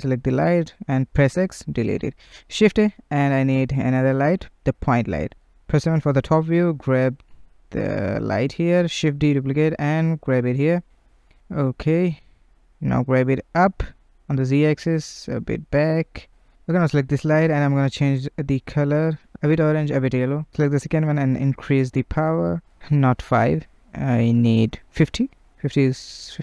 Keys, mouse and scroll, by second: 1.1-1.7 middle drag, 5.4-5.9 typing, 11.3-12.5 middle drag, 12.5 g, 13.8 middle click, 14.1 g, 15.6 click, 16.9-18.3 drag, 19.1 middle click, 19.3 click, 20.3-24.4 drag, 24.4 BackSpace, 25.7-26.4 drag.